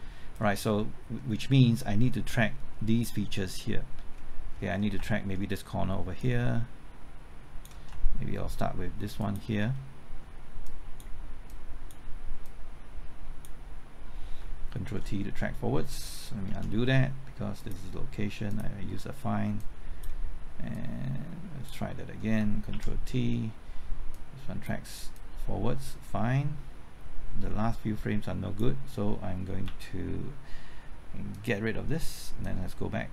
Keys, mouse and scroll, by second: 0.5 scroll down 1, 0.7 middle click, 1.3-1.6 scroll up 1, 1.6 middle click, 4.0-4.9 scroll up 1, 6.2-7.9 drag, 9.2 ctrl+click, 10.6 click, 14.4 typing, 14.8 ctrl+t, 16.3 typing, 16.5 ctrl+z, 17.6 click, 22.3 typing, 22.7 ctrl+t, 24.1 click, 25.1-29.4 drag, 29.6 Left, 31.3-33.1 drag.